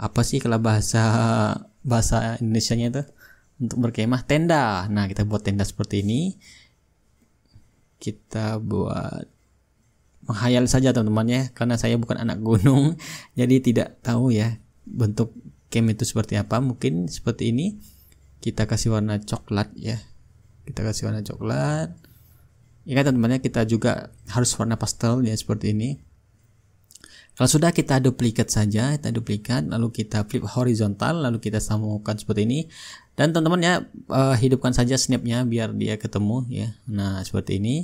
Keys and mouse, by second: 0.6 ctrl+middle click, 0.7-3.0 ctrl+drag, 4.0-5.1 drag, 8.6-9.8 drag, 11.2-12.3 drag, 15.2-16.3 drag, 19.0-20.2 drag, 21.1-22.2 drag, 24.9-27.3 drag, 27.6-28.8 drag, 28.9-30.9 right drag, 29.8-30.9 drag, 31.1-34.4 drag, 35.5-37.8 drag.